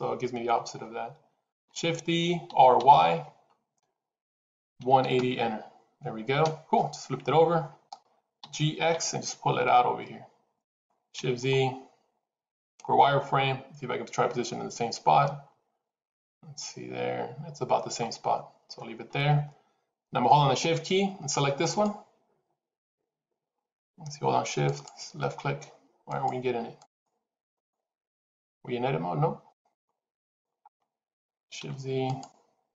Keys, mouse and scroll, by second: 1.4 shift+d, 8.3 g, 11.9 shift+z, 12.0 scroll up 1, 12.7 scroll up 2, 18.1-20.4 scroll down 2, 20.4 scroll down 1, 21.6 shift+click, 26.7 click, 27.3 click, 27.9 shift+click, 30.5 middle click, 31.5 shift+z, 31.9 click.